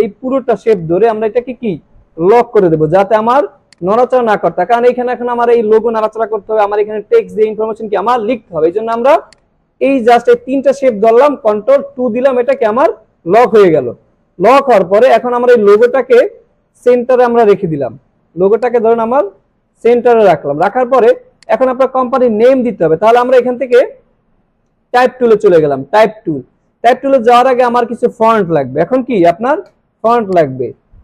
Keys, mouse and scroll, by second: 3.3 alt+scroll down 1, 3.5 space, 3.7-4.6 click, 4.1 space, 8.9-10.2 drag, 12.0 ctrl+2, 12.5 click, 14.2 alt+scroll up 1, 14.8 click, 15.7 click, 17.1 scroll up 1, 18.6-20.1 drag, 20.5 space, 20.6 click, 21.1 alt+scroll down 1, 21.3 space, 21.4-22.3 click, 21.9 space, 23.8 right click, 25.0 click, 27.7 click, 30.4-31.0 drag.